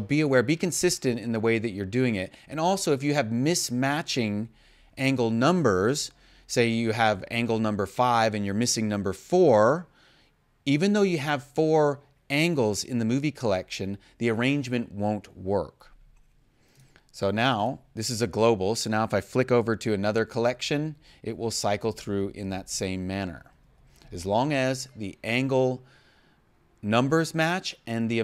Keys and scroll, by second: 20.1 0.